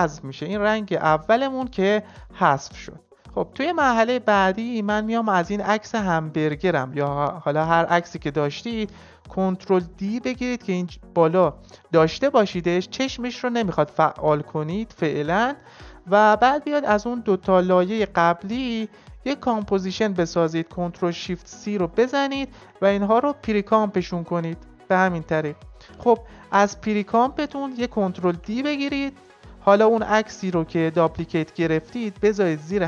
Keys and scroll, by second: 9.7 ctrl+d, 21.0 ctrl+shift+c, 28.2 ctrl+d.